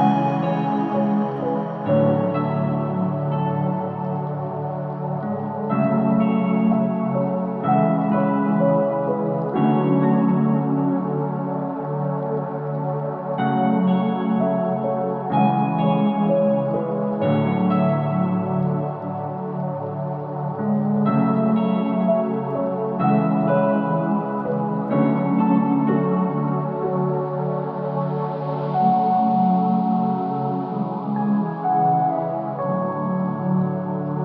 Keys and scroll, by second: 3.5 F3, 18.9 Delete, 24.4 ctrl+z, 28.0 Delete.